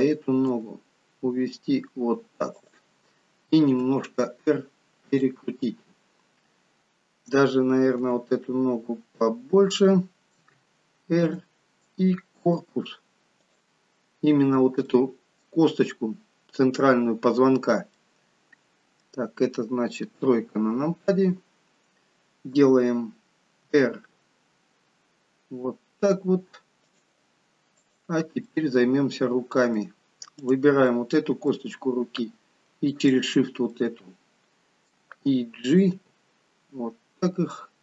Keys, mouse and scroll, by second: 0.5 click, 0.5 g, 3.6 r, 5.7 middle click, 8.1 g, 10.4 r, 12.4 click, 13.3 click, 14.9 middle click, 15.7-16.3 scroll up 1, 16.5-17.3 scroll up 3, 17.6 scroll down 2, 18.1 middle click, 20.2 KP_3, 23.7 r, 27.9 click, 28.5 middle click, 30.3 click, 30.8 middle click, 33.1 shift+click, 33.7 middle click, 36.1 g.